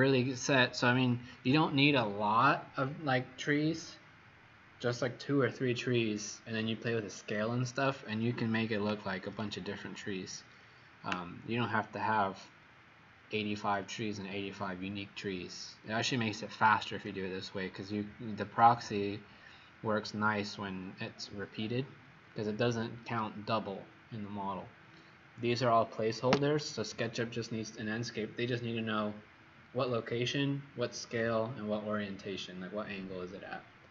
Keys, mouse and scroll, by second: 8.4 Escape, 26.5 click.